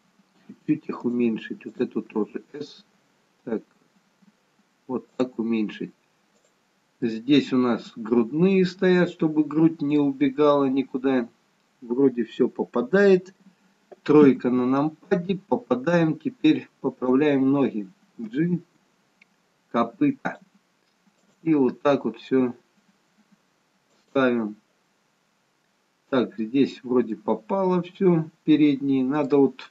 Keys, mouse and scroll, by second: 0.2 s, 1.7 click, 2.1 s, 6.4 click, 7.1 middle click, 14.3 KP_3, 16.0 click, 18.3 g, 21.3 click, 21.6 g, 27.2 middle click.